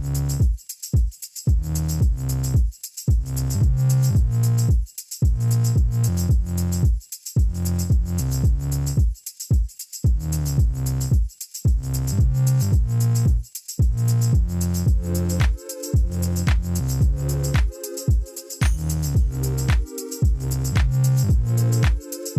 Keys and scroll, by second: 0.0-0.7 typing, 4.0 5, 4.3 Return, 6.0 ., 6.1 2, 6.2 Return, 9.2 7, 9.6 Return, 10.5 1, 11.1 Return, 15.3 Tab, 17.9 2, 18.7 ctrl+b.